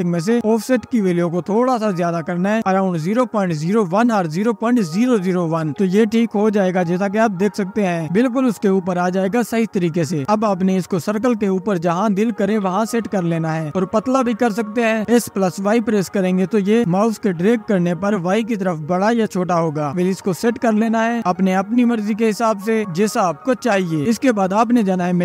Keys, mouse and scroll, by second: 0.5-1.8 scroll down 1, 1.8-4.2 drag, 5.7-8.9 drag, 10.9 click, 11.8 scroll up 2, 13.6 click, 14.4 space, 14.5-16.2 drag, 16.8 s, 21.2 y, 22.2-23.6 drag.